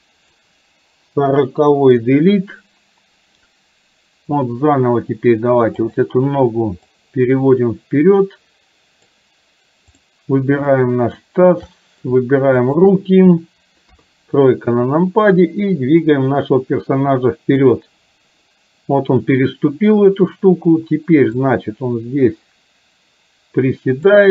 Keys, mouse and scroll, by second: 1.2 Delete, 5.9 click, 7.1-9.3 drag, 9.9 click, 10.8 shift+middle click, 11.8 middle click, 12.8 shift+click, 13.9 KP_3, 15.4-17.7 drag, 21.4 click, 21.7-24.3 drag.